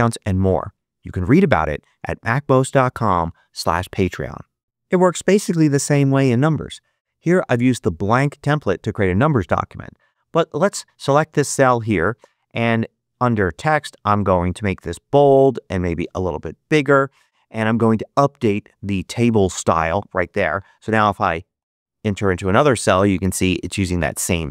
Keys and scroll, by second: 21.5 8, 22.0 Return.